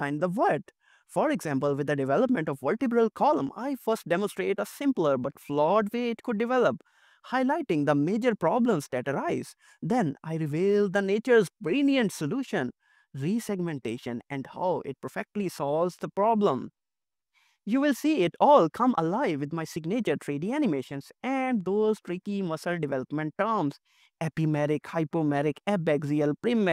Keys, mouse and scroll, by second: 2.5 middle click, 9.3 middle click, 10.1 middle click, 12.7 middle click, 14.1 middle click, 15.8 middle click, 18.1 middle click, 23.0 middle click.